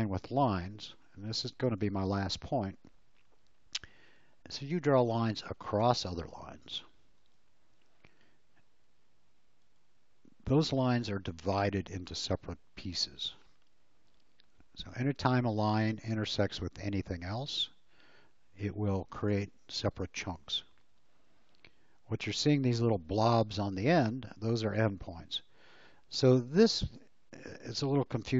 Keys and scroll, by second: 0.6 l, 7.1 space.